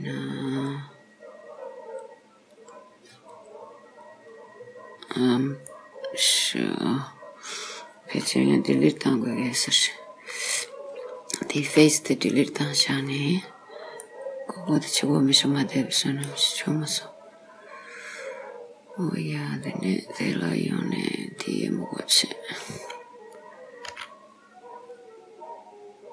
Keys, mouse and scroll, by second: 2.0 click, 3.4 click, 5.7 middle click, 6.7-8.2 scroll up 2, 8.2-8.5 scroll up 1, 11.6 x, 14.1 middle click, 19.7 click, 21.5 click, 24.0 x.